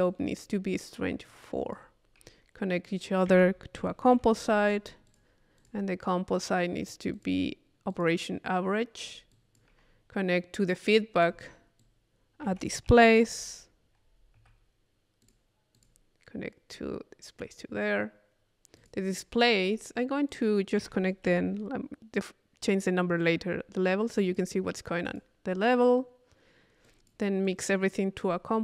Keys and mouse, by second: 1.3 click, 2.8 click, 3.3 Tab, 3.8 c, 5.1 click, 6.4-7.7 drag, 7.9 click, 9.0 click, 10.8 click, 11.8-12.9 drag, 12.5 Tab, 13.0 click, 13.3 i, 15.2 click, 15.8 click, 16.7-17.9 drag, 18.8 click, 20.3 click, 20.8 Tab, 24.3 click, 25.1 click, 26.9-28.5 drag.